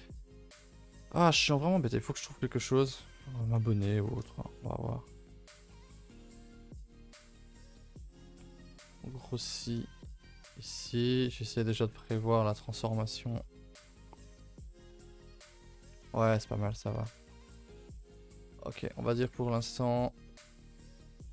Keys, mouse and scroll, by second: 0.0 middle click, 0.3-0.7 scroll up 1, 0.7-1.7 shift+middle drag, 1.7 alt+shift+click, 2.3 alt+shift+click, 2.7 alt+shift+click, 3.1 shift+middle click, 3.9 ctrl+b, 5.8 middle click, 6.0 scroll up 2, 6.2 a, 6.3 a, 6.6 alt+click, 7.2 s, 8.4 alt+click, 8.8 s, 9.5 shift+middle click, 10.3 alt+click, 10.6 s, 11.6 alt+click, 11.8 s, 13.4 click, 13.8 Tab, 14.0-14.3 middle drag, 14.3 scroll down 2, 14.6 middle drag, 14.8-16.9 typing, 15.0-15.4 middle drag, 15.4 Tab, 15.6-15.9 middle drag, 16.3 Tab, 16.5 middle drag, 16.7 scroll down 2, 17.0 middle drag, 17.3 scroll down 1, 17.5 ctrl+s, 17.6-18.7 middle drag, 18.7 scroll down 3, 18.8 a, 19.0 a, 19.0-19.5 middle drag, 19.5 ctrl+s, 19.6-19.9 ctrl+middle drag, 19.9-20.3 scroll up 2, 20.3-20.9 middle drag, 20.9-21.2 scroll up 4, 21.2-21.3 middle drag.